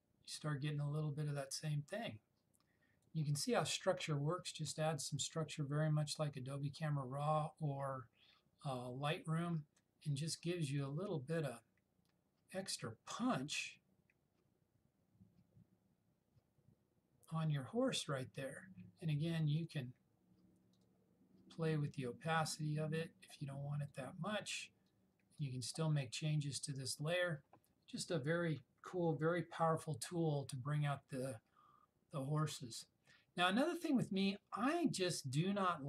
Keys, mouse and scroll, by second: 19.7-23.1 drag.